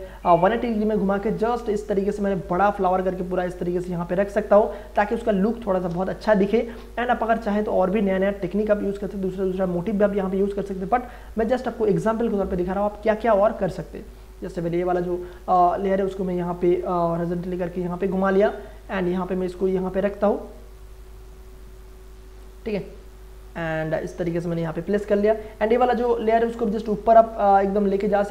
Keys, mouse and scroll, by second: 0.3 click, 1.4 alt+shift+click, 3.3-4.5 drag, 6.4 Return, 12.8 click, 13.7-15.4 alt+drag, 15.3 ctrl+t, 15.6 ctrl+right click, 16.4 ctrl+click, 18.1 ctrl+right click, 19.1-24.8 ctrl+drag, 24.8 ctrl+Return, 26.0-28.3 ctrl+drag.